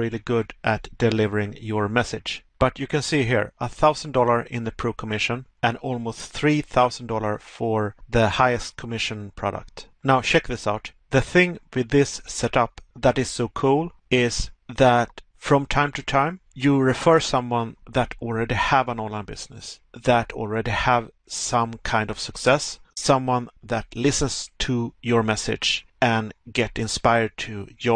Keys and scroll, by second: 2.7 Left, 13.3 Pause.